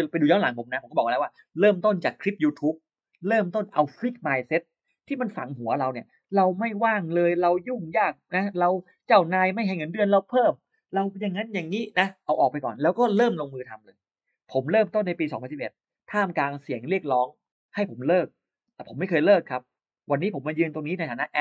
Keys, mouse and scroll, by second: 7.5 click, 8.6-9.2 scroll up 2.